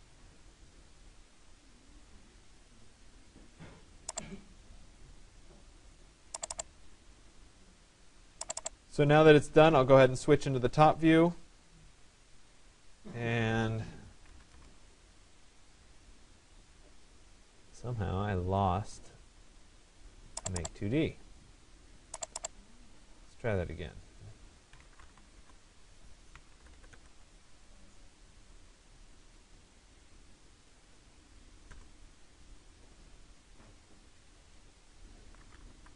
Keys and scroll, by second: 14.0 Return, 25.0 Return, 31.3 Return.